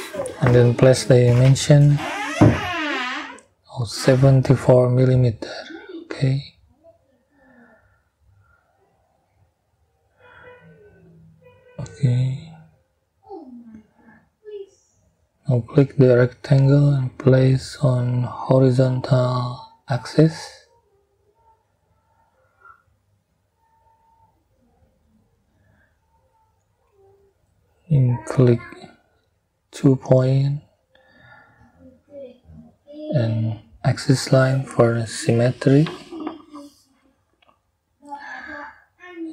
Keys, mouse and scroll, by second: 0.6 middle click, 3.3 7, 3.6 4, 5.8 middle click, 6.9 scroll down 1, 7.6-8.3 scroll up 3, 10.5 scroll down 2, 14.0 click, 14.6 scroll up 2, 19.7 click, 23.1 click, 24.7 right click, 28.6 click, 31.6 click, 34.0 click, 35.5 click, 37.3-39.3 drag.